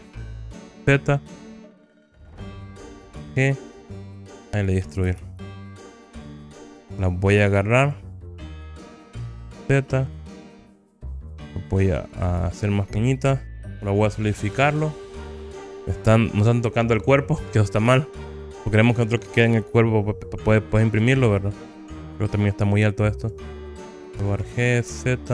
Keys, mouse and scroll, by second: 0.6 z, 2.3 Escape, 3.3 g, 4.8 click, 5.2 ctrl+z, 5.6 ctrl+z, 6.7 click, 7.1-8.2 drag, 8.8 g, 9.7 z, 11.2 click, 12.3 s, 13.4 middle click, 13.4 scroll down 1, 15.4 middle click, 15.4 scroll up 2, 18.0 Tab, 21.1 a, 21.9 click, 21.9 scroll down 4, 21.9 KP_1, 22.5-25.3 drag, 24.6 g, 25.1 z.